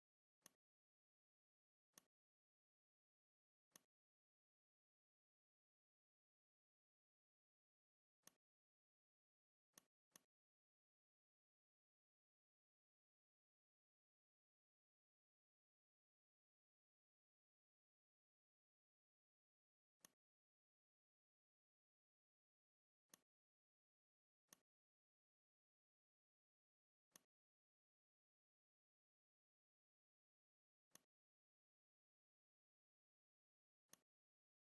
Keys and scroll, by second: 12.2 ctrl+shift+[, 14.7 ctrl+c, 17.7 shift+x, 21.8 ctrl+f.